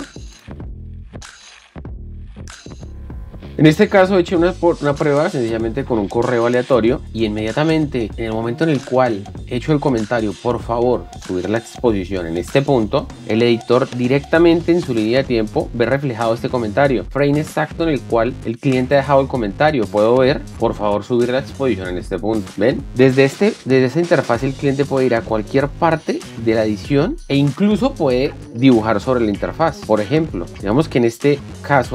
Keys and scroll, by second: 0.1 o, 2.1-2.8 typing, 13.1 alt+Tab, 15.1 $, 21.1 Left, 23.4 alt+Tab.